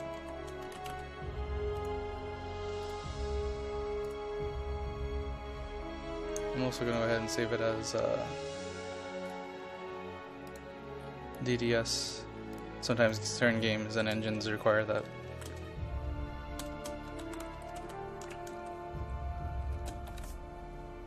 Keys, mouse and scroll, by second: 0.0-1.5 typing, 1.8 click, 11.0 scroll up 1, 11.1-12.1 scroll down 1, 12.1 click, 13.9 right click, 14.4 shift+Left, 14.9 typing, 16.9-18.4 typing, 19.6-20.8 typing.